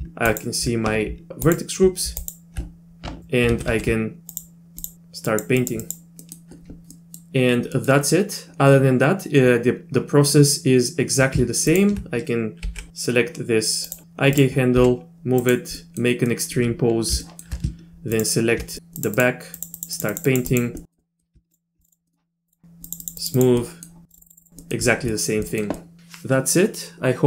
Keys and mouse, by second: 0.3 ctrl+click, 1.5 ctrl+click, 2.2 ctrl+click, 3.5 ctrl+z, 3.7 ctrl+z, 4.3 click, 5.3 click, 5.6 click, 5.8 click, 6.2 middle click, 7.0 middle click, 7.8 click, 11.8 ctrl+click, 12.7 g, 14.0 r, 14.8 g, 15.8 middle click, 16.3 middle click, 17.2 shift+middle click, 18.2 ctrl+click, 19.0 click, 19.2 click, 19.6 click, 19.8 click, 20.0 click, 20.1 click, 20.3 click, 20.5 click, 20.8 middle click, 21.0 middle click, 21.8 click, 22.1 middle click, 22.5 click, 22.9 click, 23.0 click, 23.2 click, 23.4 click, 23.6 middle click, 24.1 click, 24.2 click, 24.3 click, 24.4 click, 24.6 middle click, 25.1 click, 25.5 click, 25.8 click, 25.9 middle click.